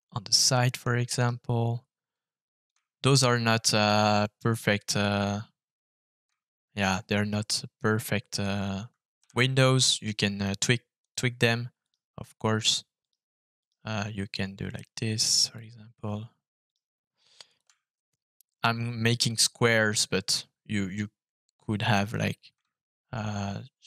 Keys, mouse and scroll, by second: 0.4 middle click, 1.1 right click, 2.6 click, 7.6 Escape, 9.9 f, 11.8 right click, 13.0 right click, 13.6 right click, 15.4 click, 16.6 right click, 17.4 click, 22.1-23.6 shift+drag.